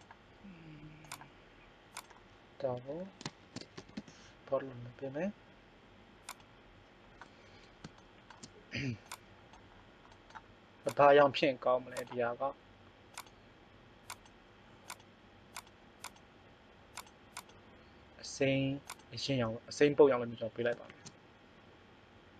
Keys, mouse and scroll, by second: 6.2 click, 15.7-16.9 drag, 20.9 shift+a.